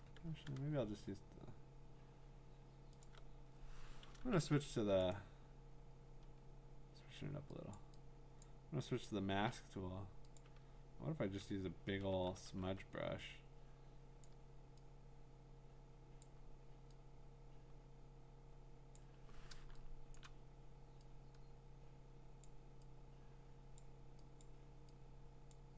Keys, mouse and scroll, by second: 0.0 q, 3.1 click, 4.3 ], 4.8 ], 4.9 ], 5.1 right click, 6.2-7.8 scroll, 7.8 click, 8.4 click, 9.1 click, 10.4 click, 10.6-12.6 typing, 14.2 click, 16.2 click, 18.9 click, 20.2 click, 20.2 click, 20.3 click, 22.4 click, 23.8 click, 24.4 click, 25.5 click.